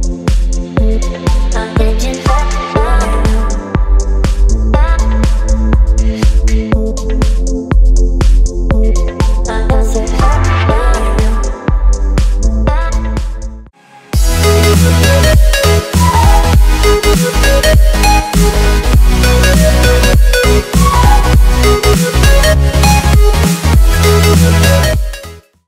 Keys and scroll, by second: 1.7 z, 5.3 v.